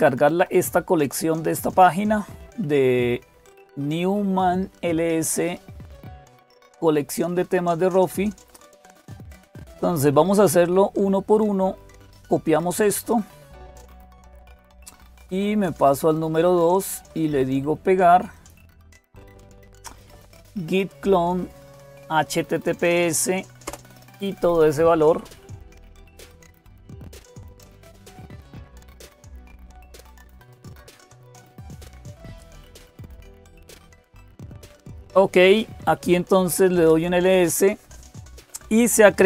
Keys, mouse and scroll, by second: 0.0-39.2 typing, 13.9 click, 15.5 click, 19.9 Right, 23.4 Return, 36.6 Return.